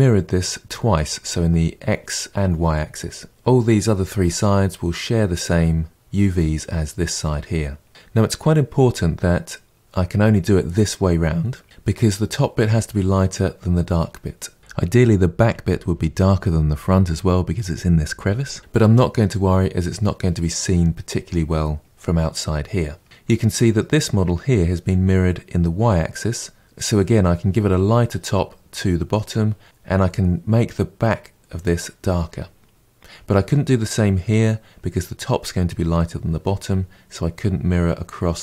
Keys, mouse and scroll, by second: 7.9-10.2 scroll down 1, 10.2 scroll down 1, 19.2-20.3 scroll down 8, 20.3-22.0 middle drag, 22.0-22.5 scroll down 3, 23.0-26.6 middle drag.